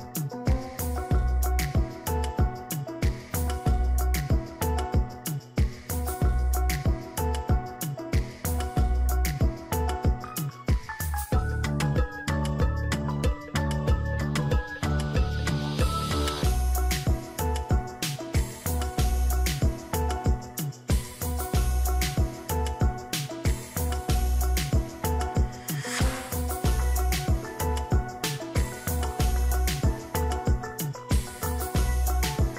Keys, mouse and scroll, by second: 19.6 ctrl+z.